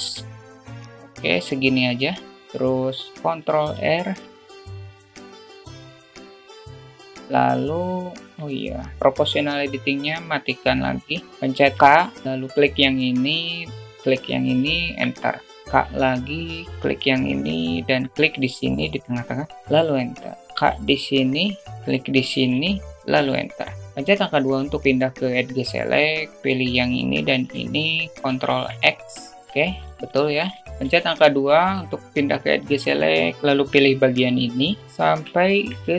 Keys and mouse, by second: 3.7 ctrl+r, 7.3 click, 8.1 ctrl+z, 10.0 click, 11.2 click, 12.0 k, 13.5 k, 16.3 k, 20.4 a, 21.0 k, 27.7 shift+click, 28.9 ctrl+x, 30.4 1, 31.3 2, 35.3 alt+shift+middle click, 35.8 alt+middle click.